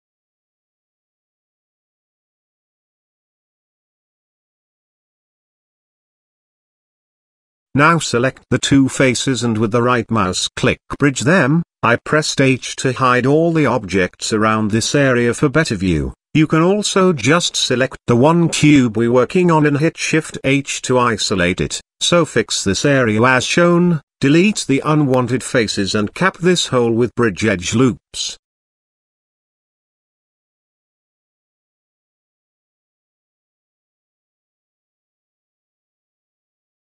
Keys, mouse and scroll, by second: 0.6-1.7 middle drag, 2.3 g, 3.9 middle click, 5.9 click, 6.7 click, 7.1 middle click, 8.0 shift+click, 8.4-10.1 right drag, 10.1 middle click, 11.5 Tab, 11.8 click, 12.6 h, 13.2-13.5 middle drag, 15.1 click, 15.3 h, 15.7-16.4 middle drag, 16.7 click, 17.8 click, 17.8 h, 18.6 Tab, 19.6 click, 20.1 shift+click, 20.6 x, 22.4 click, 23.0-25.8 middle drag, 26.0 x, 26.6 middle click, 27.6 shift+middle click, 29.2 click, 29.9 click, 30.6 shift+click, 35.6 Tab, 36.4-36.8 middle drag.